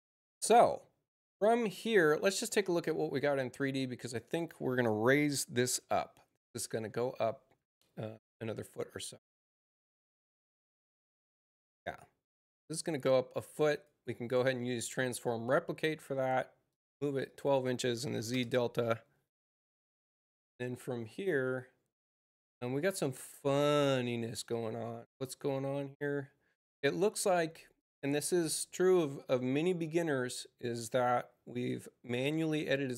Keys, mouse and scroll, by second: 0.2 click, 2.6 click, 12.7 click, 13.6 click, 16.9 click, 17.2 click, 27.7 click, 32.0 click.